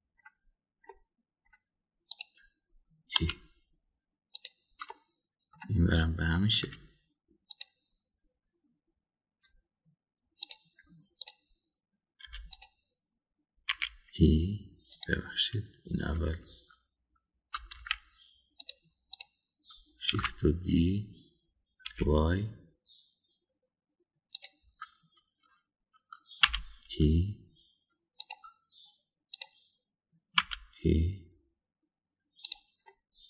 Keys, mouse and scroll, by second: 0.6-1.2 middle drag, 1.9-2.5 middle drag, 4.1 e, 5.9 middle click, 7.5 ctrl+r, 12.2 click, 13.2 3, 13.4 click, 14.7 e, 18.7 ctrl+z, 19.6 click, 20.1 click, 21.1 shift+d, 27.4 e, 31.3 e.